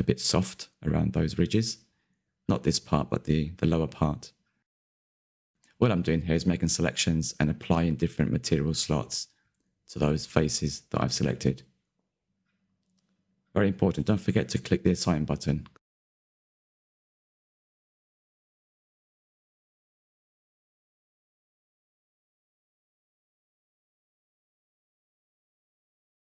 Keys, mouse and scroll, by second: 0.0-0.6 scroll down 2, 0.6 ctrl+i, 0.9 h, 1.2 z, 1.3 middle click, 1.8 click, 1.9 scroll up 3, 2.1 Tab, 2.3 Tab, 2.3 middle click, 2.5 scroll up 1, 2.8 middle click, 3.2 alt+click, 3.6 middle click, 4.2 ctrl+KP_Add, 4.3 ctrl+KP_Add, 4.4 ctrl+KP_Add, 4.6 middle click, 5.0 c, 5.6 middle click, 5.9-7.0 drag, 7.3 alt+h, 7.6 Tab, 7.7-8.0 scroll down 2, 8.0 click, 8.3 click, 8.4-9.5 shift+middle drag, 9.5 click, 10.1 click, 10.3 click, 10.5 Tab, 10.8 a, 10.8 a, 11.2 l, 12.1-13.7 drag, 13.8 Tab, 14.0 click, 14.6 Tab, 14.9 a, 14.9 a, 15.1 l, 15.4 click, 15.7 Tab, 16.3-16.8 shift+middle drag, 16.8 click, 17.0 Tab, 17.1 middle click, 17.3-17.7 scroll up 4, 17.7 a, 17.7 a, 17.9 middle click, 18.3 scroll up 1, 18.4 c, 19.9 shift+middle click, 20.1-20.5 scroll up 1, 20.5 c, 21.2 ctrl+KP_Add, 21.3 ctrl+KP_Add, 21.3 ctrl+KP_Add, 21.5 scroll down 1, 21.6 middle click, 22.0 ctrl+KP_Add, 22.6-24.5 shift+middle drag, 24.5 ctrl+KP_Add, 25.3 middle click, 25.7 click, 25.8 Tab, 25.9 click, 26.0 scroll down 3.